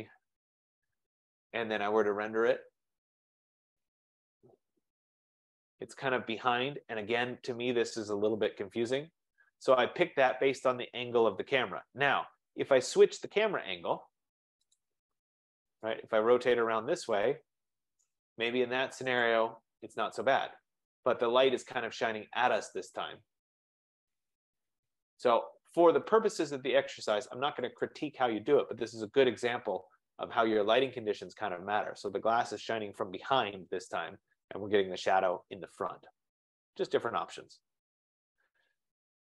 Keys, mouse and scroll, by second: 0.0-1.0 typing, 3.9-5.0 typing, 4.2 click, 5.1 Return, 5.1-8.9 drag, 14.9-16.4 drag, 18.1 right click, 19.5 click, 27.9-33.0 drag, 34.3 F15.